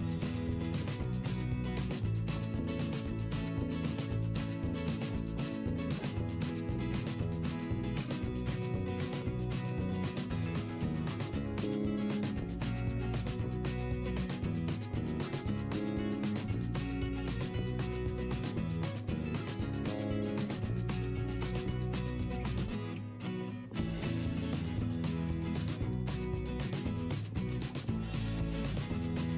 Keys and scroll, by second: 5.6 v, 9.1 p, 13.6 ctrl+z, 16.3 v, 17.6 d, 19.0 c, 19.3 v, 22.4 v, 24.8 ctrl+z, 25.6 [, 25.9 p, 27.3 v, 29.0 p.